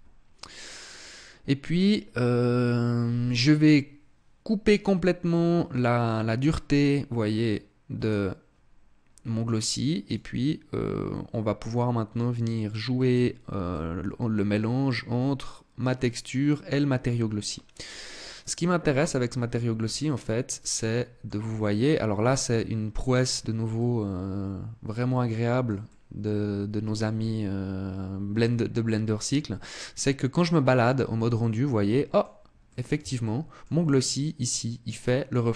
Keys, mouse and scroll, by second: 6.4 click, 9.7 click, 13.3 click, 17.5-18.6 scroll down 3, 18.6 right click, 19.5-19.8 scroll up 4, 20.3 middle click, 21.1-21.6 scroll up 3, 21.9 middle click, 22.9-23.3 scroll up 2, 23.3 middle click, 25.1 middle click, 25.5 middle click, 30.9 middle click, 32.3 middle click, 32.7 shift+middle click, 35.3-35.5 scroll down 2.